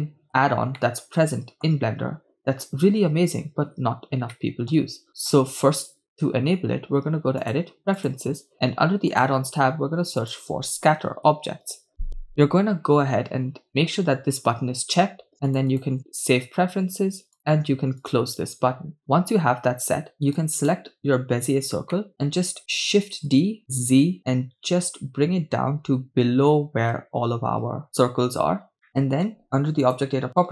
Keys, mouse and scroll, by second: 0.9-2.5 middle drag, 4.4 shift+middle click, 5.1 scroll up 1, 5.3-5.7 shift+middle drag, 7.7 click, 20.4 right click, 22.1 shift+middle click, 23.8 z, 28.7 shift+click, 29.4 middle click, 29.9 click.